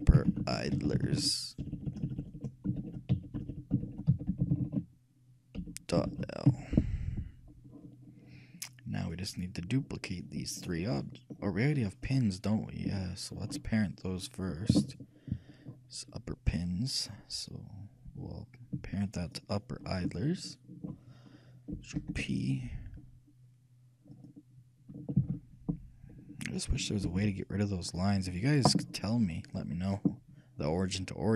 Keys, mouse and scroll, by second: 0.1 p, 1.9 BackSpace, 2.0 BackSpace, 2.4 BackSpace, 2.5 BackSpace, 3.7 BackSpace, 9.2-12.4 right drag, 9.9 middle click, 11.8-13.3 shift+middle drag, 14.3 shift+click, 14.3-16.1 shift+right drag, 15.9-18.9 shift+middle drag, 19.4-21.2 ctrl+right drag, 20.7-22.4 ctrl+shift+drag, 22.1 ctrl+shift+p, 25.4 ctrl+z, 27.2 ctrl+p.